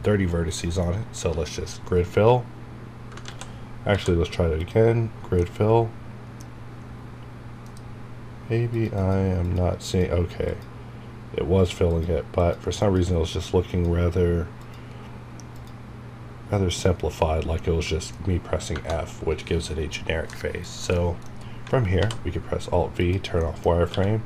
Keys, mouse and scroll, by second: 1.7 scroll up 1, 2.4 scroll down 1, 5.4 middle click, 6.5 scroll up 1, 7.3 scroll down 1, 8.9 click, 17.2 scroll down 1, 17.6 middle click, 18.7 Tab, 19.0 scroll down 1, 20.3 middle click, 20.6 scroll down 1, 20.9 middle click, 21.3 scroll down 1, 22.0 alt+v, 23.0 click, 23.4 middle click, 23.9 q.